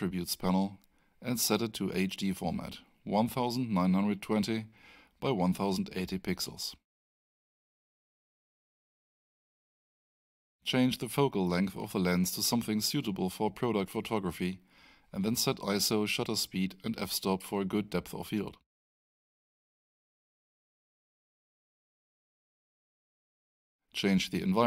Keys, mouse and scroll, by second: 0.3-4.2 typing, 5.0 click, 7.2 click, 8.5-8.9 scroll down 1, 9.7 click, 10.4-11.5 typing, 11.7 Tab, 12.5-13.9 typing, 14.0 Tab, 15.4 typing, 15.9 Tab, 17.0 8, 18.1 Return, 23.5 click.